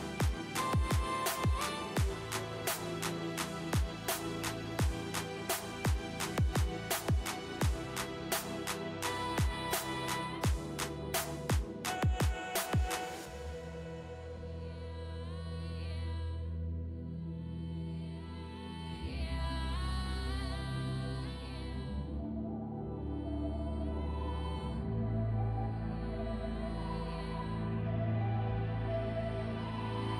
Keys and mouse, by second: 0.1 s, 2.0 g, 4.3 g, 5.6 g, 8.3 g, 9.0 g, 10.0 g, 12.6 g, 14.3 g, 16.9 g, 18.4 g, 20.3-24.1 drag, 20.3 g, 22.3 g, 25.1-30.1 drag, 25.4 g, 27.8 g, 29.3 g.